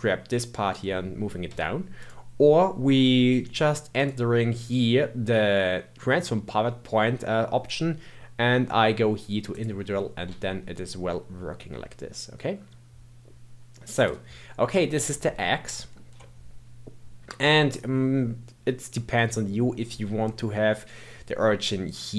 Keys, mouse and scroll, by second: 2.0 click, 3.9 click, 10.2 s, 14.6-15.2 scroll up 2, 15.2-18.2 shift+middle drag.